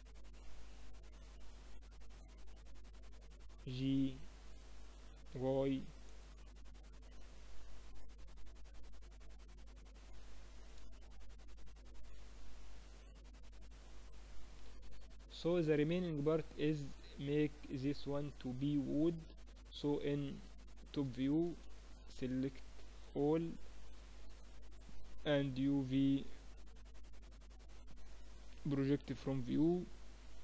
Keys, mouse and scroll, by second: 4.7 g, 6.3 z, 12.3 g, 13.1-14.1 drag, 14.1 middle click, 17.3-18.8 drag, 18.9 KP_7, 20.6 Tab, 20.9 a, 21.1 a, 21.8 a, 23.3-25.3 drag, 23.3 a, 23.8 a, 24.7 u.